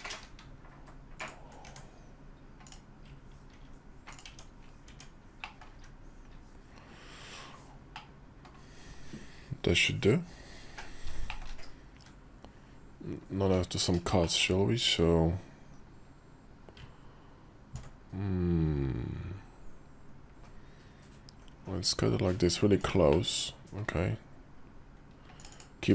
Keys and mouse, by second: 1.1 ctrl+click, 1.4 Tab, 2.4 click, 3.3 ctrl+b, 4.0 Tab, 4.6 Tab, 5.2 middle click, 5.5 `, 6.5 KP_5, 7.7 middle click, 8.6 KP_5, 11.1 shift+middle click, 14.0 shift+click, 15.5 KP_5, 17.5-25.4 ctrl+drag, 22.9-25.3 middle drag.